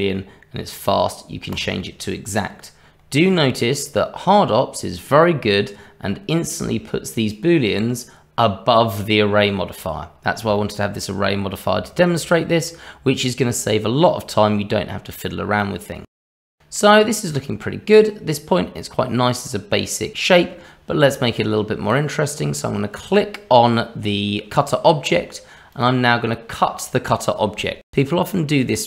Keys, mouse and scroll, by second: 6.1-8.9 scroll down 1, 10.5 shift+middle click, 11.8 shift+middle click, 12.6 middle click, 15.6 middle click, 22.9 click, 25.7 click, 27.8 scroll up 1, 28.3 middle click.